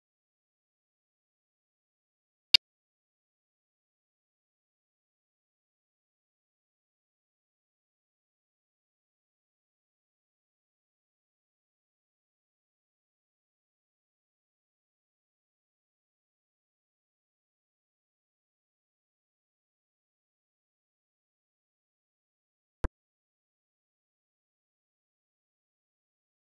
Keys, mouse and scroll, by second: 0.0 shift+a, 1.5 ctrl+z, 1.7 click, 1.8 x, 1.9 click, 2.2 z, 2.4 click, 2.5 scroll down 3, 2.5 middle click, 2.7 scroll up 2, 2.8 middle click, 3.1 shift+click, 3.3 Tab, 3.5 u, 4.8 scroll up 4, 5.0-5.4 scroll down 2, 5.4 click, 6.1 scroll down 7, 6.3 a, 6.4 s, 7.0-8.0 scroll up 6, 7.1 middle click, 8.0-8.7 scroll down 6, 8.0 middle click, 8.2 ctrl+shift+click, 8.7 z, 10.2-10.7 scroll down 1, 10.7 middle click, 10.8 scroll up 1, 11.0 click, 11.4 shift+a, 13.7-14.4 scroll up 2, 14.4 ctrl+shift+click, 14.9-15.7 scroll up 8, 15.9 scroll down 13, 16.4 s, 17.0 Tab, 17.1 middle click, 17.4 scroll down 3, 17.5-18.1 ctrl+shift+drag, 18.8 scroll up 6, 19.1 middle click, 19.6-20.7 drag, 21.1 scroll down 2, 21.5 KP_0, 22.0 click, 23.0 click, 23.6 KP_Decimal, 23.8-24.5 scroll up 3, 23.9 middle click, 24.5 ctrl+b, 25.2 scroll down 1, 25.3-25.8 scroll up 8, 25.8 middle click.